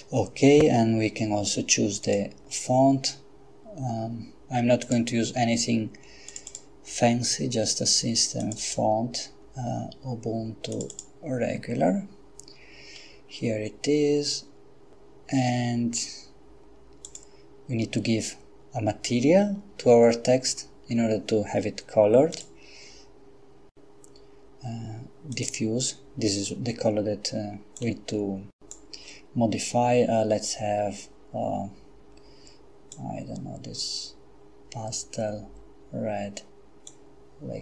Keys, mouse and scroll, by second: 2.0 click, 4.8 click, 6.3 click, 8.4 click, 10.7 click, 17.1 click, 22.3 click, 25.3 click, 27.8-29.2 drag, 32.9-37.4 drag.